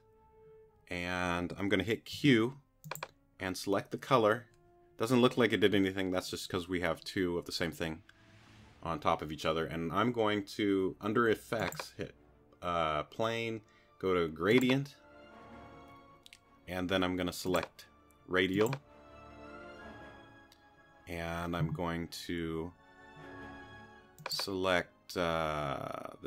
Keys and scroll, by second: 2.1 q.